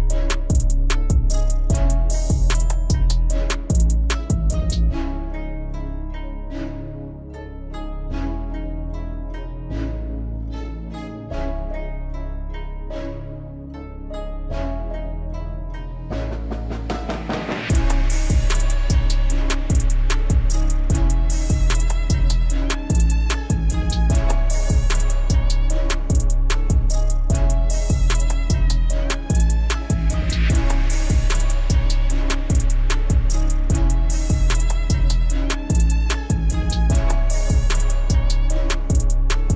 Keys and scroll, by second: 27.6 F4.